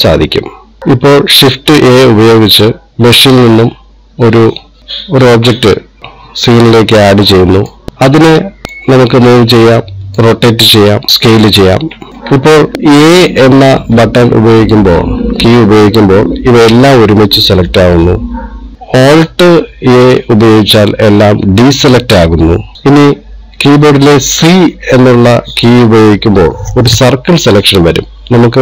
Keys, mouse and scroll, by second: 0.8 n, 3.0 shift+a, 7.9 click, 8.6 middle click, 9.9 click, 11.1 middle click, 15.1 a, 17.0 middle click, 21.1 alt+a, 22.7 shift+click, 23.5 click, 25.5 c.